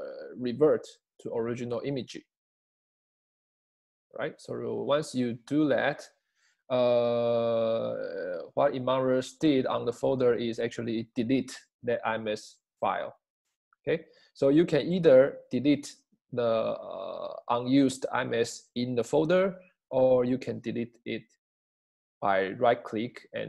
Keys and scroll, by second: 22.1 space.